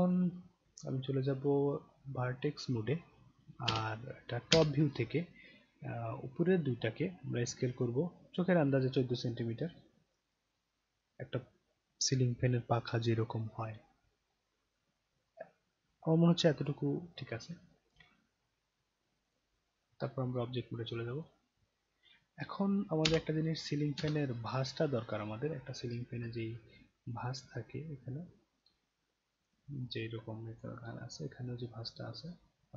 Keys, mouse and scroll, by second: 0.5-3.0 right drag, 3.7 space, 4.5 space, 5.2-5.5 scroll up 2, 6.0-6.5 drag, 7.7 click, 9.0-16.6 drag, 19.3 click, 19.8-21.3 right drag, 23.0 space, 24.0 space, 25.0 click, 26.4-26.8 alt+middle drag, 27.1-29.4 alt+drag, 30.5 click.